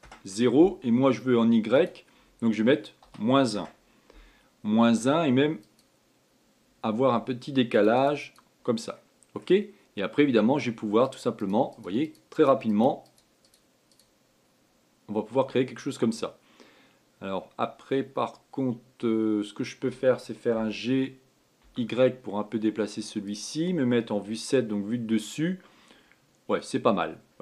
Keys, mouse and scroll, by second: 6.3-9.7 drag, 9.7-11.8 middle drag, 11.8-17.7 drag, 21.3 g, 24.9 KP_7, 25.7-27.4 scroll down 2.